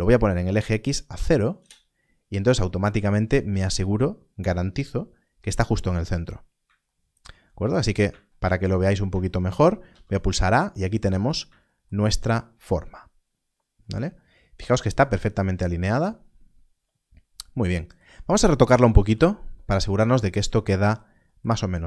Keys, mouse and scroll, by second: 1.0 0, 1.5 Return, 6.5 Return, 7.2-8.0 shift+scroll down 2, 9.8 a, 10.9 scroll up 1, 19.8 scroll up 1, 21.6-21.8 scroll up 1.